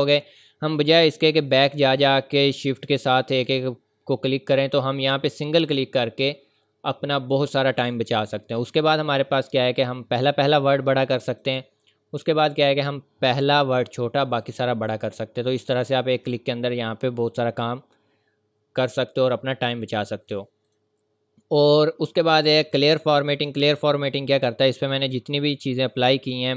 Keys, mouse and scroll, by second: 5.6 click, 10.4 click, 14.4 click, 20.6 click, 24.5 click.